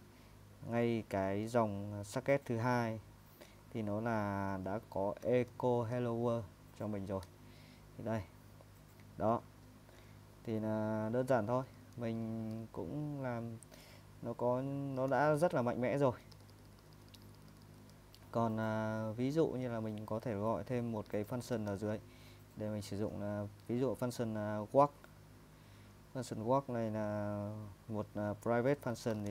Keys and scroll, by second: 5.2 ctrl+n, 5.5 ctrl+n, 7.2 Tab, 9.7 ⟲, 11.5-15.9 typing, 19.6 typing, 21.3-22.2 typing, 28.7-29.3 typing.